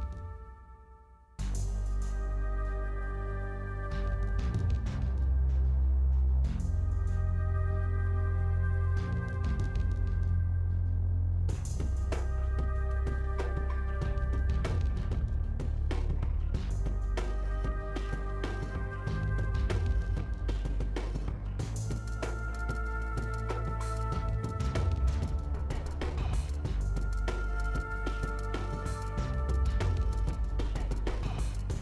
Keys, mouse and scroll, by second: 0.0 scroll down 8, 0.3 shift+middle click, 0.4-1.0 shift+scroll up 5, 1.0 shift+middle click, 1.3 shift+d, 1.9 shift+middle click, 2.1 shift+scroll up 4, 2.3 shift+middle click, 2.6 g, 3.3 shift+middle click, 3.4-4.0 scroll up 15, 3.5 shift+middle click, 4.0 shift+middle click, 4.5 click, 5.0 g, 5.7 click, 6.5 g, 7.1 shift+scroll up 6, 7.1 shift+middle click, 7.3 click, 7.8 g, 8.0-9.2 scroll down 33, 8.5 shift+middle click, 8.7 click, 9.2 shift+middle click, 9.4-9.9 scroll down 2, 9.9 middle click, 10.3 click, 10.5 middle click, 11.1 ctrl+s, 16.5 scroll down 1, 16.6-18.1 middle drag, 18.1 scroll down 1, 18.2-19.3 middle drag, 19.3 shift+a, 19.9 s, 21.5 ctrl+b, 22.1 shift+click, 22.4 middle click, 22.6 shift+click, 22.7 shift+middle click, 23.2 ctrl+b, 23.7 ctrl+z, 23.9 shift+middle click, 24.7 3, 24.7 click, 25.1 e, 25.8 click, 26.0 2, 26.4 click, 26.8 middle click, 27.4-28.7 drag, 28.7 ctrl+b, 31.1 middle click.